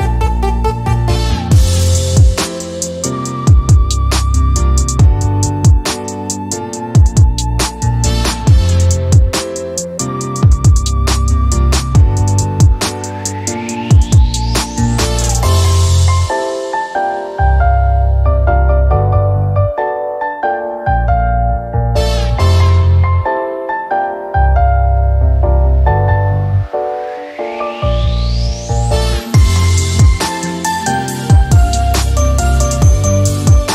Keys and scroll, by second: 13.2 typing, 14.3 Return, 16.7-17.4 typing.